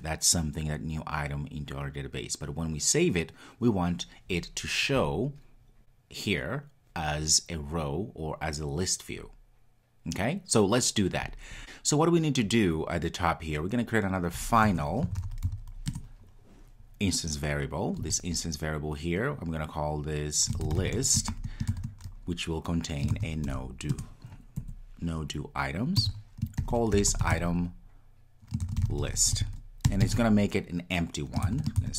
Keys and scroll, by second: 15.9 Return, 23.9 Return.